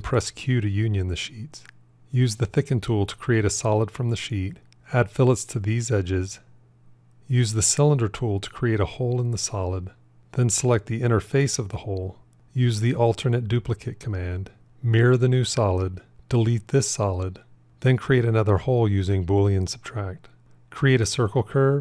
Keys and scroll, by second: 13.3 alt+d, 14.6 alt+x, 19.5 q.